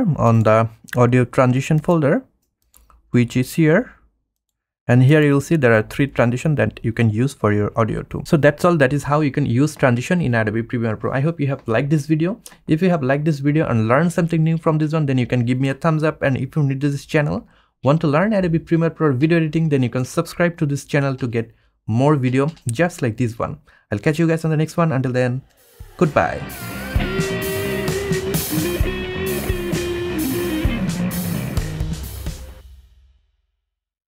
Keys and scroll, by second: 3.4 F1.